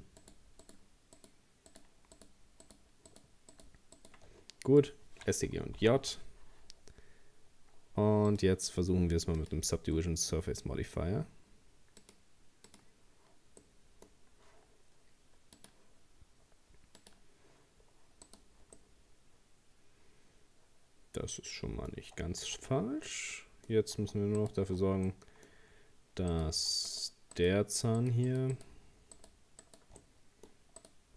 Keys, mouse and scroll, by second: 0.2 shift+right click, 0.6 shift+right click, 1.2 shift+right click, 1.7 shift+right click, 2.2 shift+right click, 2.7 shift+right click, 3.1 shift+right click, 3.5 shift+right click, 4.0 shift+right click, 4.4-5.1 scroll down 2, 5.8 ctrl+j, 8.3-10.6 drag, 10.6-12.0 middle drag, 12.0-13.6 drag, 13.6-15.6 middle drag, 15.6-17.8 drag, 17.8-18.3 scroll down 2, 18.3 right click, 18.8-21.8 middle drag, 21.9-22.5 scroll up 1, 22.5 Tab, 23.0 scroll up 1, 23.1 middle click, 24.0 Tab, 24.4 right click, 24.7 Tab, 25.1 middle click, 25.8-26.3 scroll up 1, 26.3 right click, 26.9 shift+right click, 27.4 shift+right click, 28.0 shift+right click, 28.3 shift+right click, 28.6 shift+right click, 29.2 shift+right click, 29.6 shift+right click, 30.0 middle click, 30.8 shift+right click.